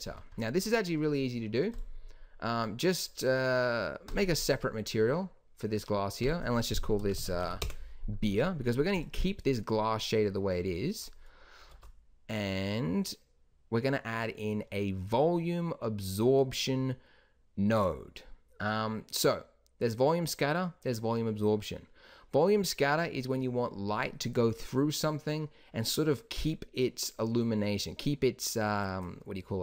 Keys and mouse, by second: 3.8 middle click, 7.5 e, 8.3 middle click, 11.9 shift+a.